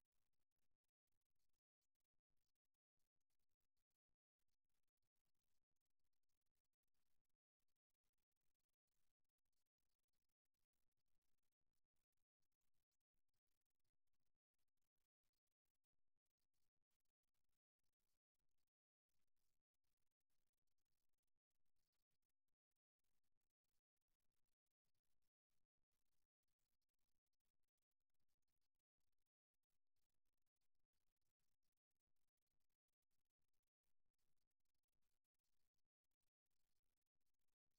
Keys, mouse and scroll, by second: 2.0-3.8 right drag, 4.0-5.8 drag, 8.8 click, 10.0-14.3 middle drag, 14.8-18.9 middle drag, 18.9 k, 26.6 right click, 28.2-29.4 right drag, 31.8-34.8 middle drag, 34.8 click, 35.6-37.7 drag.